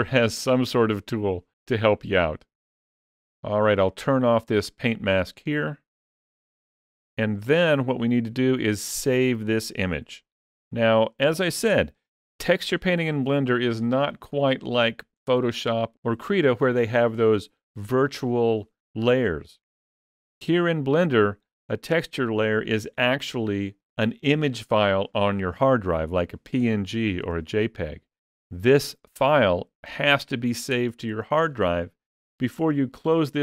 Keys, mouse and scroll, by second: 5.9 click.